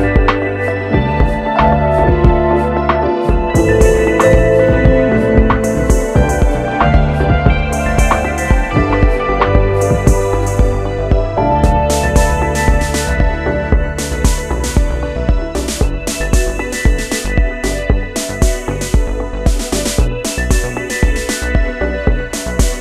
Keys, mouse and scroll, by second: 13.4 ctrl+click, 16.4 click.